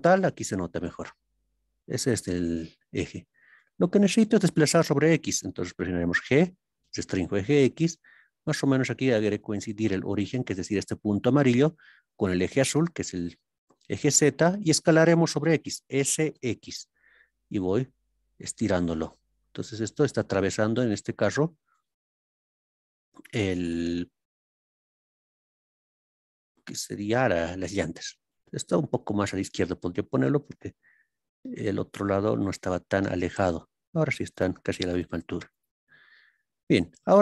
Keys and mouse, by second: 10.1 click, 27.1 click, 33.3 click, 34.3 click, 34.9 click, 35.4 click.